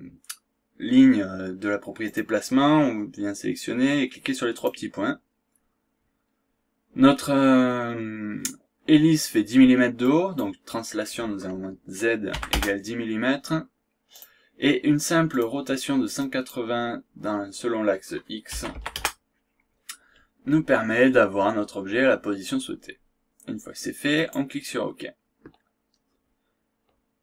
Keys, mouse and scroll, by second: 2.0 click, 4.5 click, 10.0 click, 12.3 KP_1, 12.5 KP_0, 14.1 click, 15.3 click, 16.2 click, 18.5 KP_1, 18.7 KP_8, 18.9 KP_0, 24.1 click.